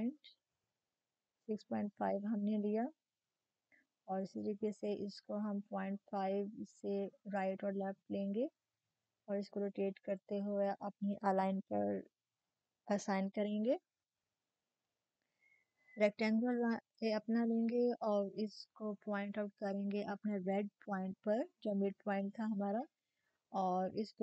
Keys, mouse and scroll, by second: 0.0 ctrl+shift+m, 0.0-0.8 typing, 2.9 click, 4.4 -, 5.1 click, 9.0 click, 10.1 typing, 13.9-24.2 drag.